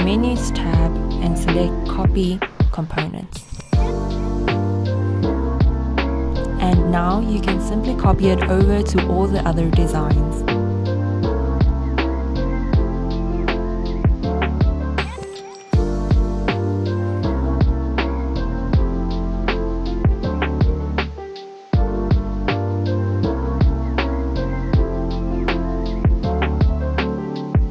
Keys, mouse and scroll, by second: 1.8 click, 4.0-4.5 scroll down 1, 4.9 click, 6.8-8.3 scroll down 1, 8.3 click, 10.3 click, 12.5-13.4 scroll down 1, 13.4 click, 16.5-18.1 scroll down 1, 18.1 click, 21.9 click, 22.4-23.3 scroll down 1, 23.3 scroll up 1, 24.0 click, 26.3 scroll up 1, 26.9-27.7 drag.